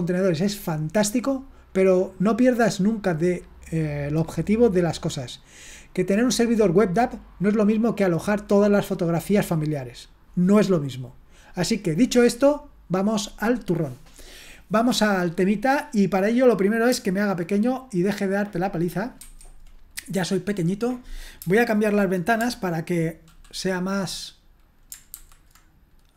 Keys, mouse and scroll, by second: 16.4 click, 16.7 click, 19.2 ctrl+1, 20.8 click, 25.1 super+h.